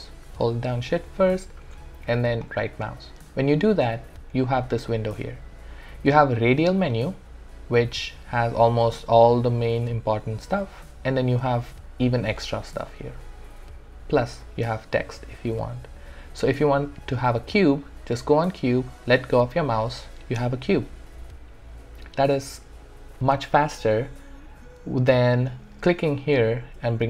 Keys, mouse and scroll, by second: 26.5 click.